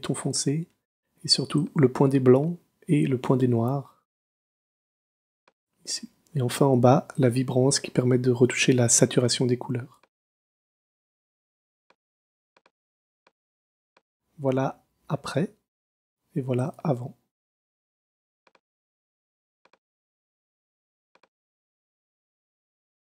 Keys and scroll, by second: 13.1 super+space.